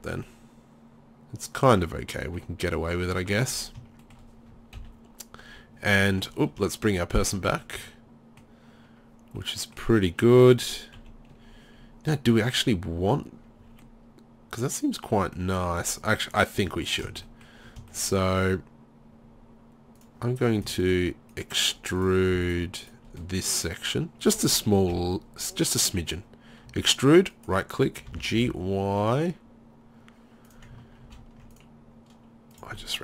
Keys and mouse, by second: 4.8 KP_3, 7.6 middle drag, 8.3-9.4 middle drag, 9.5 middle click, 11.0 KP_3, 15.9-16.4 middle drag, 16.4 right click, 16.6 Tab, 17.3 middle drag, 17.4 right click, 17.5 middle drag, 17.7 right click, 18.0 right drag, 23.2 middle click, 24.9 KP_3, 26.7 e, 28.1 g, 29.9 middle click, 30.5 click, 31.1 ctrl+r, 32.3 click, 32.6 click, 32.9 middle click.